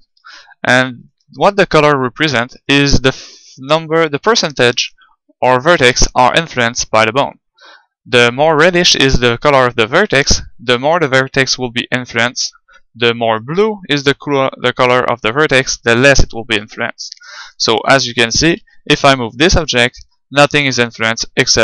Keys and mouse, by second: 2.8-4.6 drag, 4.8-6.7 drag, 13.3-14.9 drag, 14.9 right click, 18.7 g.